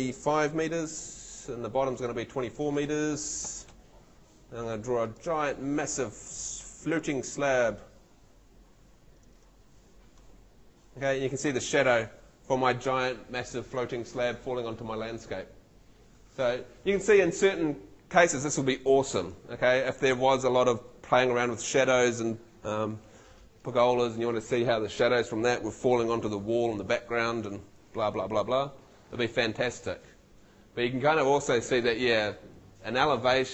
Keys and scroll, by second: 0.6 5, 3.5 2, 3.8 4.